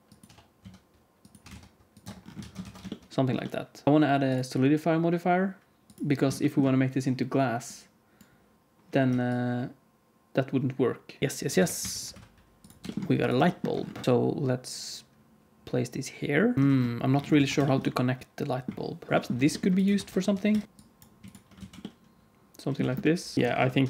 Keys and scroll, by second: 0.2 e, 1.4 e, 1.9 Tab, 2.3 alt+a, 2.6 ctrl+s, 3.8 Tab, 11.2 KP_1, 11.2 s, 11.7 q, 12.0 s, 13.1 g, 14.0 alt+a, 14.0 ctrl+s, 16.6 ctrl+s, 17.3 ctrl+s, 19.4 shift+d, 19.9 alt+r, 20.0 alt+g, 20.6 g, 21.1 x, 21.5 alt+z, 22.7 Tab, 23.3 g, 23.5 alt+z, 23.6 alt+a.